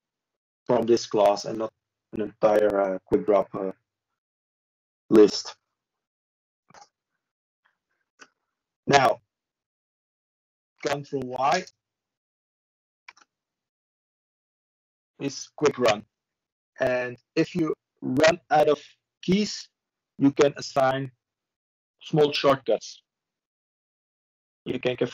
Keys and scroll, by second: 16.0 ctrl+space, 18.7 typing.